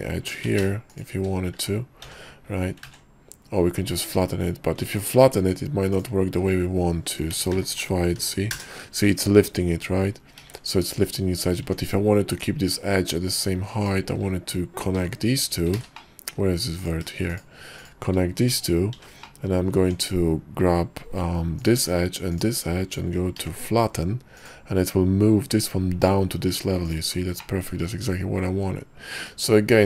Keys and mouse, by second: 0.6 ctrl+z, 2.2 j, 3.0 ctrl+z, 5.0 z, 5.5 Tab, 6.0 click, 7.4 s, 10.7 ctrl+z, 11.7 Tab, 12.4 click, 13.9 shift+click, 15.1 j, 15.9 ctrl+z, 16.1 middle click, 16.9 click, 17.4 shift+click, 17.9 shift+click, 19.1 j, 19.4 click, 19.9 Tab, 21.7 click, 22.4 shift+click, 23.5 y, 27.6-29.5 middle drag.